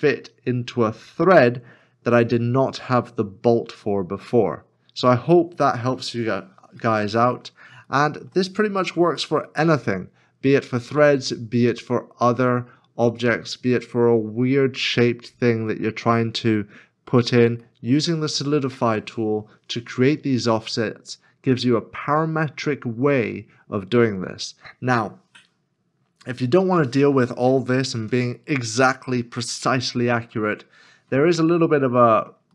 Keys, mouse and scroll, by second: 3.8 middle click, 6.2 scroll down 1, 7.0 middle click, 8.0 shift+middle click, 9.2 middle click, 15.7 middle click, 20.3 scroll up 1, 30.9 scroll up 1, 31.0 middle click.